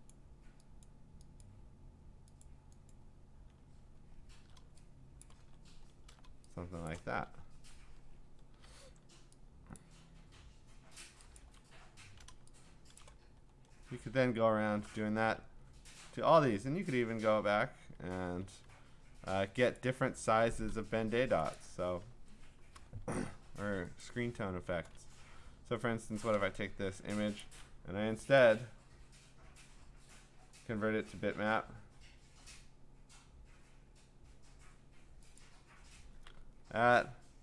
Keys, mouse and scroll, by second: 0.1 click, 0.9 click, 1.4 click, 2.4 click, 2.9 click, 3.8-4.6 scroll, 5.2 click, 5.8 scroll, 6.9 click, 7.2-8.6 alt+scroll, 9.8 click, 11.4 click, 11.8 scroll, 13.0 click, 13.3-14.2 scroll, 16.4 ctrl+Tab, 19.8 click, 21.5 click, 24.0 click, 25.2-26.0 scroll, 26.1 middle click, 28.4-30.6 click, 35.4 click.